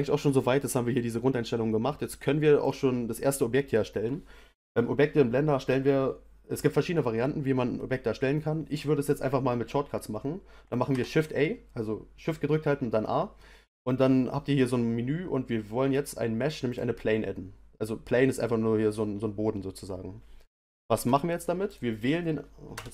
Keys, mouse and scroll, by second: 2.6 click, 10.9 shift+a, 21.0 space, 21.7 click, 22.7 Return.